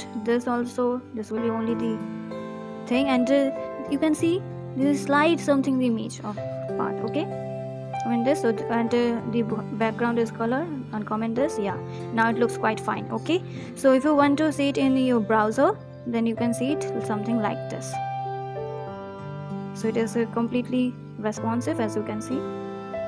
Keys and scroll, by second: 1.3 ctrl+/, 4.4 ctrl+/, 6.5 ctrl+s.